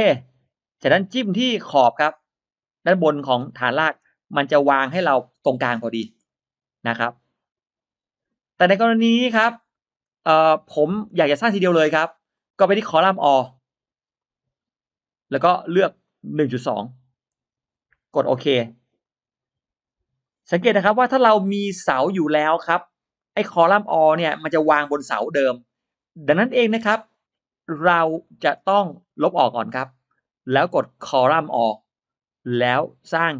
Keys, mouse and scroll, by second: 0.0 click, 0.8-1.8 scroll up 1, 3.3 click, 3.8-4.1 scroll down 1, 4.3-5.1 scroll up 2, 5.2 click, 5.6-6.4 scroll down 1, 9.2 scroll down 1, 9.6 middle click, 10.6 middle click, 12.2 click, 14.0 click, 15.9 click, 17.2 1, 17.8 2, 18.9 click, 20.3-21.0 scroll up 1, 20.8 middle click, 21.1 scroll down 1, 22.6-23.0 scroll down 1, 23.0 middle click, 25.2 middle click, 25.6 scroll down 1, 26.6 e, 27.0-28.5 drag, 28.7-29.0 scroll down 1, 29.0 middle click, 29.4-30.0 scroll down 1, 30.5 click, 31.6 click, 32.8 click.